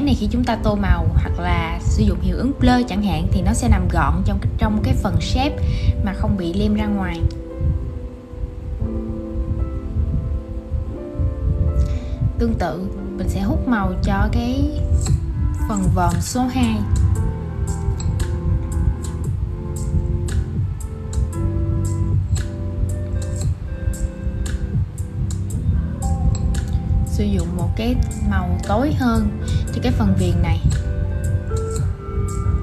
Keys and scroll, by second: 13.7 super+c, 17.4 shift+super+v.